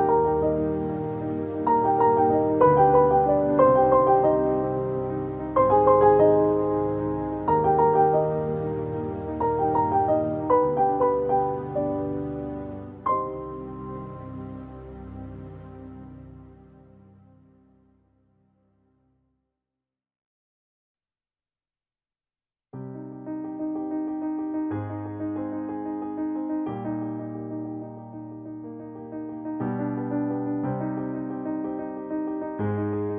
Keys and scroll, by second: 32.0 ctrl+u.